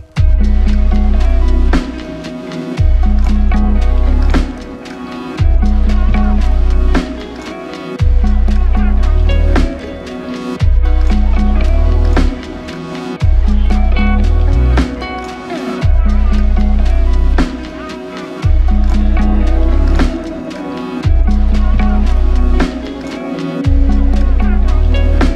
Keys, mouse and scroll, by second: 4.1 alt+click, 5.7 double click, 6.3 f, 7.1 double click, 11.2 alt+click, 13.7 f, 16.8 double click, 19.8 alt+shift+click, 22.5 shift+click, 24.3 alt+shift+click.